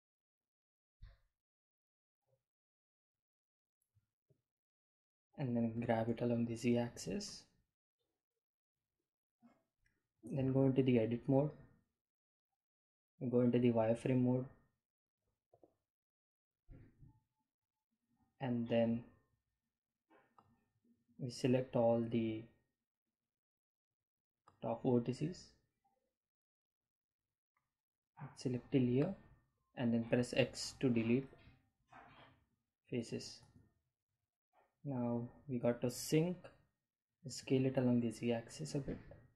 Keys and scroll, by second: 1.1 shift+a, 8.0 g, 8.7 z, 11.0 Delete, 12.2 Tab, 17.3 1, 31.3 x, 34.3 Tab, 38.0 s, 38.3 z.